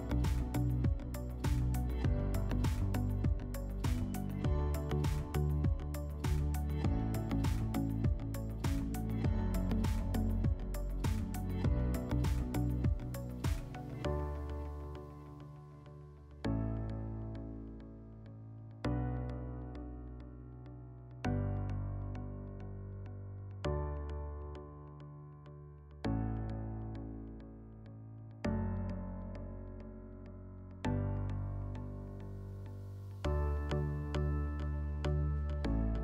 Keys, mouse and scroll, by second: 2.2-3.7 middle drag, 3.7 click, 5.0-6.8 drag, 9.3-15.4 drag, 23.0 middle click, 23.3 scroll, 24.0 shift+middle click, 25.0 shift+click, 26.7 shift+click, 28.2 click, 30.0-31.5 drag, 34.5-36.0 drag.